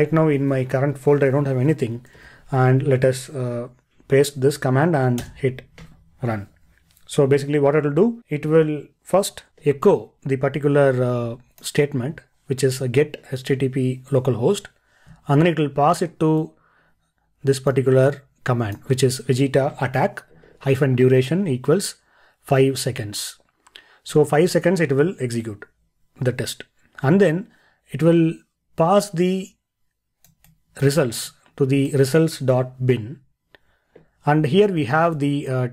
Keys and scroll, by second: 2.2 super+v, 9.5 ctrl+e.